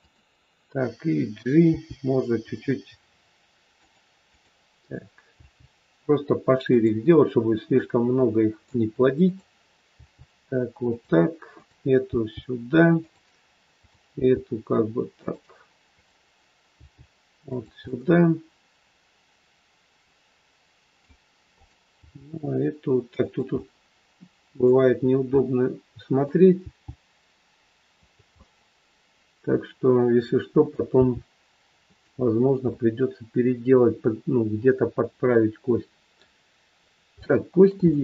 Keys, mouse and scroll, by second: 1.6 g, 4.3 click, 5.3 g, 7.6 middle click, 9.2 click, 9.9 g, 11.4 click, 12.2 g, 13.7 click, 14.0 g, 15.9 click, 16.7 g, 17.7 scroll up 1, 17.9 middle click, 21.5 click, 21.9 g, 23.5 middle click, 25.0 scroll down 1, 25.3 middle click, 26.5 g, 28.4 middle click, 30.9 g, 32.8 middle click, 36.8 scroll up 2, 37.1 shift+middle click, 37.8 scroll up 1, 37.9 middle click.